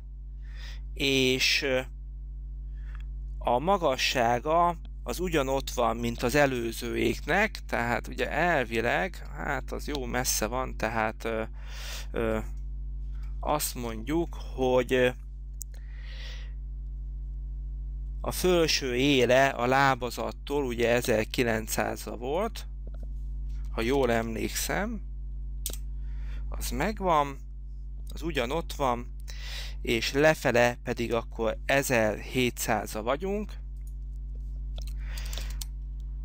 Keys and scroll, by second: 23.5-24.6 typing, 25.9 Return, 34.7-36.0 typing.